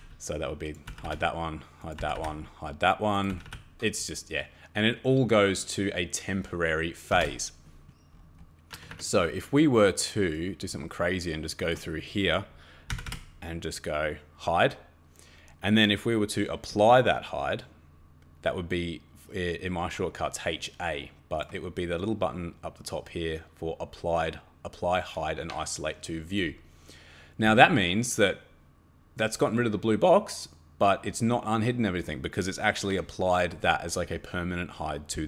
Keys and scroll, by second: 0.9 h, 1.0 h, 2.0 h, 2.2 h, 3.3 h, 3.4 h, 6.9-7.6 typing, 8.7 Escape, 8.9 Escape, 12.9 h, 13.1 h.